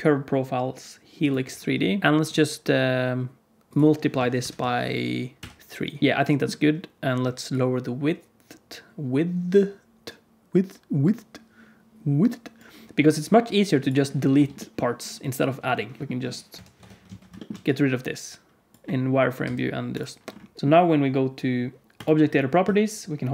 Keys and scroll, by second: 14.3 Tab, 16.0 g, 16.4 KP_1, 16.7 Tab, 17.0 alt+z, 19.4 x, 20.5 Tab, 20.6 alt+z, 20.6 KP_Decimal.